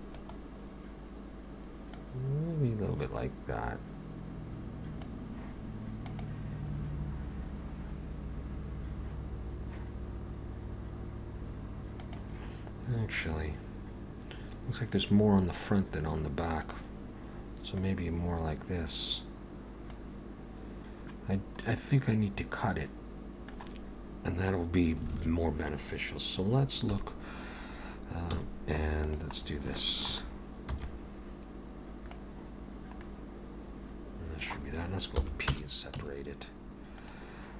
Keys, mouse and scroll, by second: 1.9 click, 17.8 click, 21.6 middle click, 25.1 alt+a, 26.9 KP_1, 28.3 z, 29.4-29.7 scroll down 2, 29.7 shift+middle click, 30.3-30.7 scroll up 1, 30.7 b, 33.0 middle click, 35.2 p, 35.9 Tab, 37.0 click.